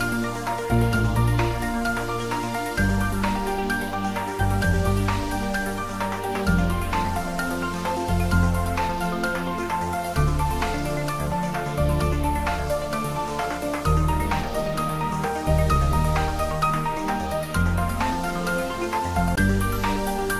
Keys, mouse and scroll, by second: 4.0 click, 7.5-9.4 scroll down 1, 10.6 click, 13.2 click, 16.1 click, 19.2 click.